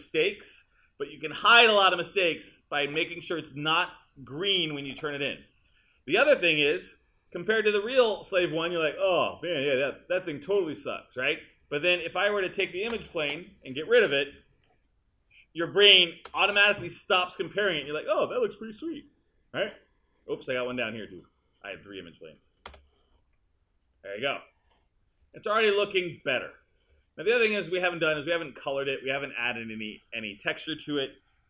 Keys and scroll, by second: 13.0 BackSpace, 16.3 BackSpace, 22.7 BackSpace.